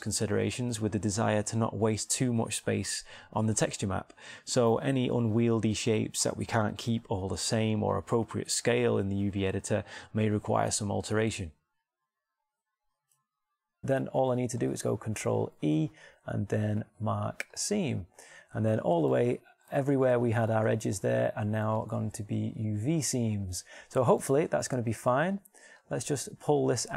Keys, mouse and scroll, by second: 1.0 right click, 1.8 alt+shift+middle click, 2.8 middle click, 6.0 middle click, 8.2 middle click, 8.4-9.6 middle drag, 10.9 middle click, 14.8-16.0 middle drag, 16.0 ctrl+e, 19.8 middle click, 21.8 a, 25.2-26.4 middle drag.